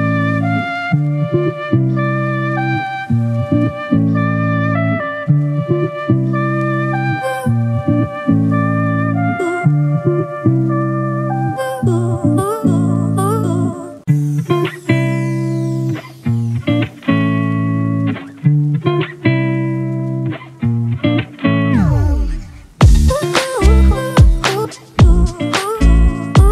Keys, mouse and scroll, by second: 11.0 alt+click, 17.1 right click, 22.1 double click.